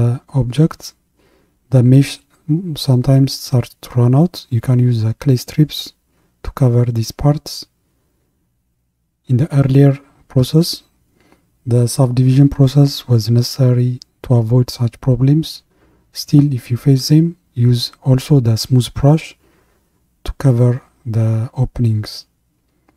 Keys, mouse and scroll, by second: 16.6-20.9 drag.